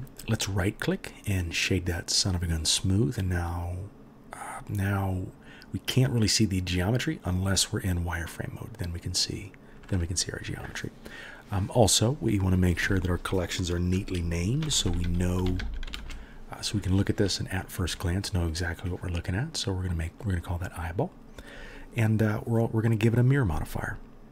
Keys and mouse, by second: 0.4-12.5 drag, 15.9 l, 19.0-24.3 drag, 19.0-24.0 middle drag, 19.0-24.0 right drag.